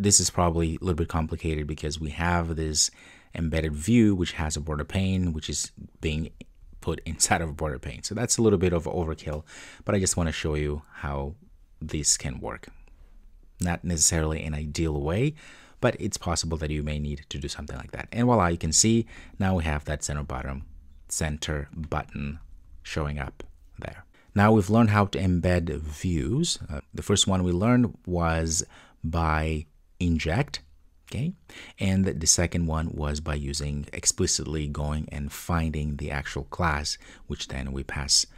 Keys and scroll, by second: 12.8 ctrl+d.